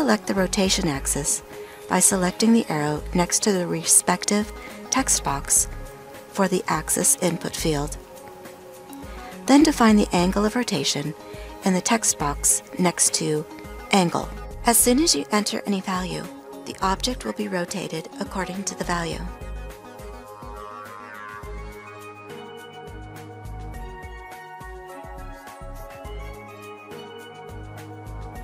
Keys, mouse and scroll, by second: 19.3-24.3 ctrl+middle drag.